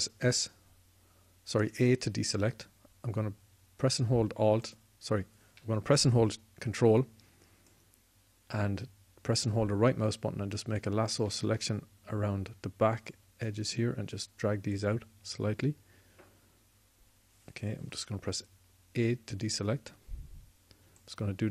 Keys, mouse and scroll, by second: 0.0 a, 5.8-12.1 drag, 13.9-18.8 drag, 18.8 a.